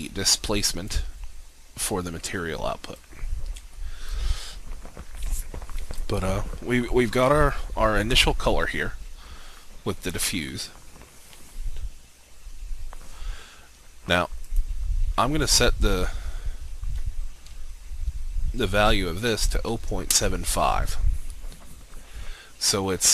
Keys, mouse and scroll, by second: 18.9-19.7 typing, 20.2 Return.